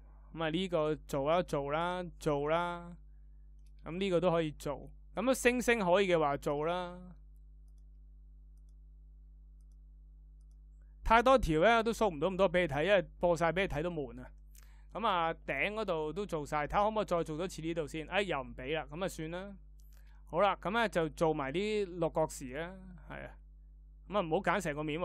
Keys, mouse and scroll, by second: 24.4-25.0 shift+middle drag.